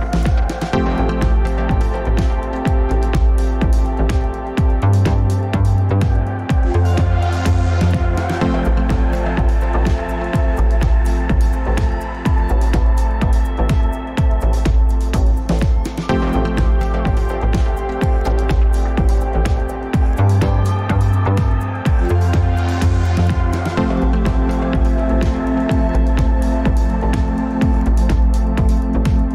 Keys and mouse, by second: 0.4 middle click, 2.3 middle click, 3.5 ctrl+click, 4.3-7.0 middle drag, 8.0-10.6 middle drag, 15.9 middle click, 22.2-23.1 drag, 26.7 click, 28.5 g.